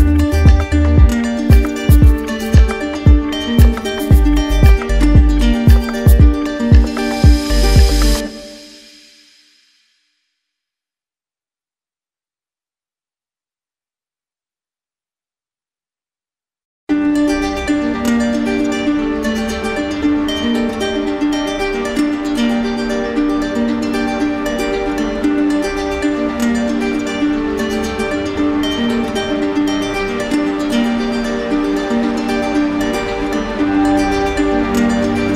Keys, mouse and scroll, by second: 0.0 shift+right click, 0.9 alt+right click, 1.9 alt+right click, 2.3-3.3 right drag, 3.5-5.3 right drag, 5.5 click, 7.2 right click, 8.2 right click, 8.8 alt+right click, 9.0 alt+right click, 9.8 right click, 11.7 click, 13.0 click, 15.4 right click, 16.4 click, 18.0 click, 18.3 right click, 18.8 shift+right click, 19.6 alt+right click, 20.3 right click, 21.1 alt+right click, 22.2 alt+right click, 22.9 d, 23.0 d, 23.5 d, 24.2 right click, 25.0 click, 25.8 shift+right click, 26.7 alt+right click, 27.7 right click, 30.3 right click, 30.8 shift+right click, 32.4 right click, 33.7 click.